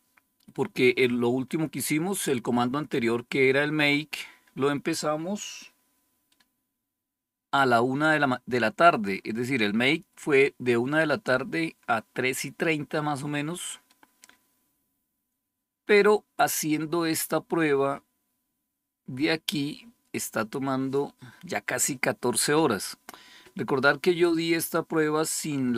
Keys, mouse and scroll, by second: 2.6-4.5 scroll up 2, 4.5-5.1 scroll down 2, 5.1-25.7 scroll down 1.